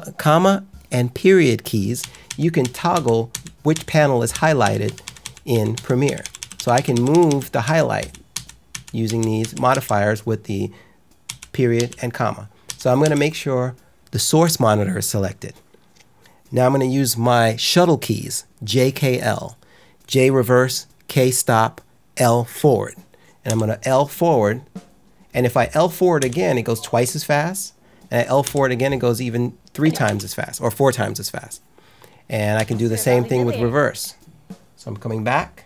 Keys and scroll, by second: 2.0 ctrl+shift+., 6.0 ctrl+shift+,, 7.6 ctrl+shift+., 9.0 ctrl+shift+,, 11.2 ctrl+shift+., 11.7 ctrl+shift+,, 12.6 ctrl+shift+., 12.9 ctrl+shift+,, 23.4 l, 26.1 l, 30.0 k, 32.5 j.